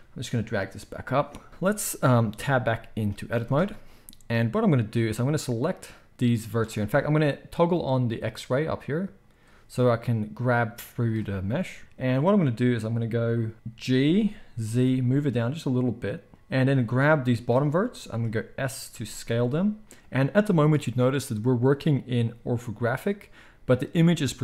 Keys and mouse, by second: 3.3 Tab, 5.4-16.3 drag, 13.9 g, 16.3 middle click, 16.6-20.0 drag, 18.9 s, 20.0-24.4 middle drag.